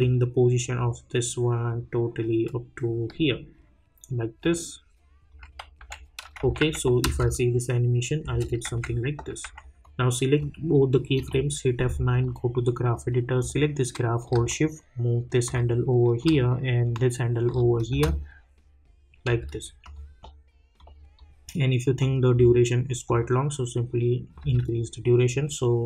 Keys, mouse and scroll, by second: 0.0-5.8 drag, 5.8 k, 6.4 j, 7.0 space, 8.6 j, 9.5 j, 9.8-11.1 drag, 11.1 F9, 12.1-16.2 drag, 16.2-17.9 drag, 17.9 space, 19.8-24.4 drag, 24.4 space.